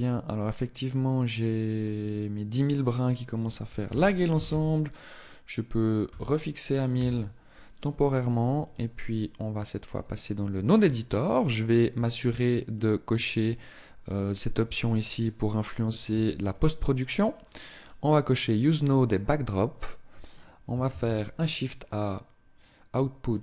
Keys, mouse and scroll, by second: 2.2 click, 8.0 click.